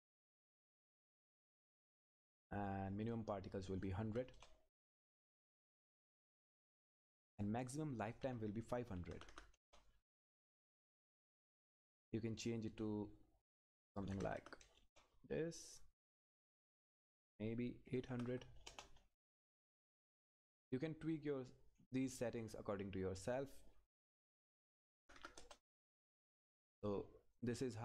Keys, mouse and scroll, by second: 2.1 click, 4.3 Return, 7.3 click, 12.4 click, 14.8 Return, 16.3 click, 18.7 Return, 20.6 click, 25.4 Return, 26.7 click.